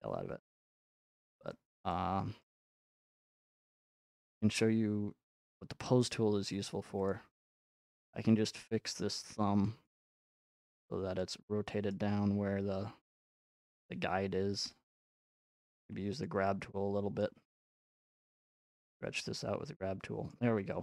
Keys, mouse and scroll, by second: 1.3 middle click, 1.8 shift+middle click, 2.4-2.8 scroll, 4.3 scroll, 4.6-5.5 scroll up 2, 4.9 middle click, 5.5-9.2 drag, 6.4 f, 9.7-13.3 drag, 14.9-15.8 typing, 16.2 click, 17.2 click, 17.5-18.2 typing, 18.1-19.3 drag, 20.2 click, 20.3-20.8 middle drag.